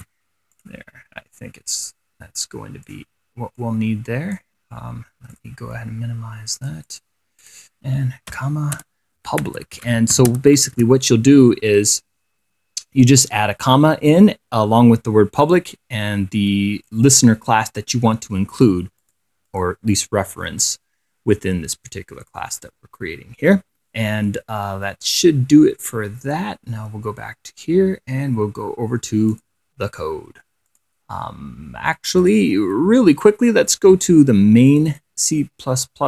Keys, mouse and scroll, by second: 0.2 ctrl+c, 0.8 click, 2.1-3.4 drag, 3.9 click, 4.7 click, 5.6 click, 6.8 click, 7.7 click, 8.0 middle click, 9.0-10.9 typing, 11.0 ctrl+v, 12.4 KP_1, 12.7 KP_7, 13.4 KP_1, 13.9 7, 15.7-17.4 drag, 18.0 click, 19.3 click, 19.7 click, 26.1 click, 29.6 click, 31.0 click, 32.5 click, 35.0 click.